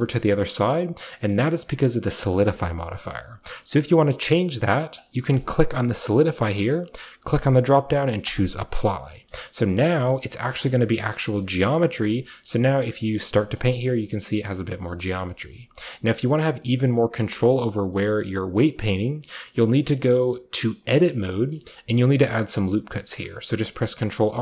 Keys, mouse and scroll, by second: 1.0-2.3 scroll down 1, 2.3 scroll down 1, 2.5-5.2 shift+middle drag, 5.2-10.3 drag, 9.2-10.3 middle drag, 10.3 typing, 10.5 shift+middle click, 11.1-12.0 shift+scroll up 1, 12.0 click, 12.0 scroll up 1, 13.8 click, 14.6-15.5 scroll down 1, 14.8-17.4 shift+middle drag, 14.8 typing, 15.5-17.2 shift+scroll up 1, 17.2 shift+scroll up 1, 17.4 typing, 18.2-19.5 middle drag, 19.5 click, 20.7 click, 22.9 ctrl+r, 23.9 click.